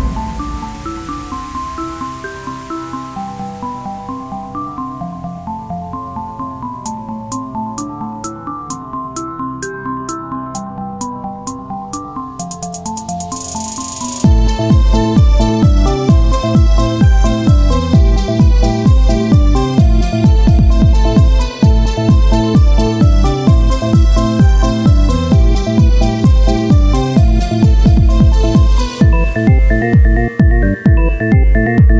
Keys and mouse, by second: 1.4 click, 3.1-6.7 drag, 6.7 Tab, 7.7 KP_3, 8.1 ctrl+Tab, 9.3 x, 10.1 z, 10.4 c, 12.5 c, 12.7 z, 13.2-15.2 drag, 14.7 x, 15.7 z, 15.9 c, 16.4-18.0 drag, 17.9 z, 18.2 Tab, 22.4 right click, 23.3 Tab, 25.1 right click, 27.1 z, 29.3 c, 29.9 z, 31.3 o.